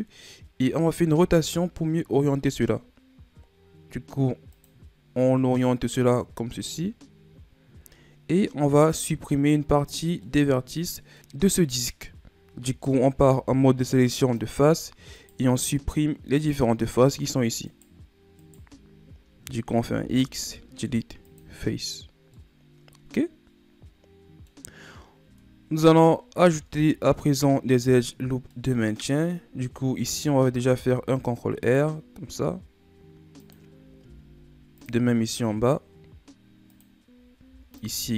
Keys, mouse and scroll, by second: 1.1 r, 9.3 right click, 10.2 middle click, 11.1-13.0 scroll down 1, 13.0 ctrl+Tab, 15.1-19.7 right drag, 19.7 x, 22.3-25.2 middle drag, 25.2 Tab, 25.7 Tab, 26.7 ctrl+Tab, 28.5-30.6 middle drag, 30.6 ctrl+r, 34.0 ctrl+r, 37.4 ctrl+r.